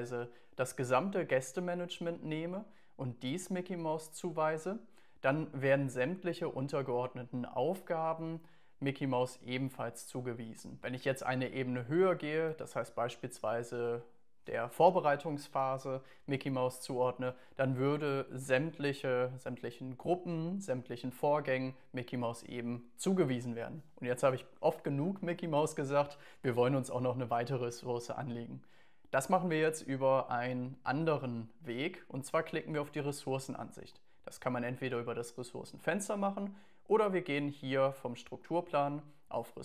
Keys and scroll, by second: 10.8 Up, 12.5 Up, 18.3 Down.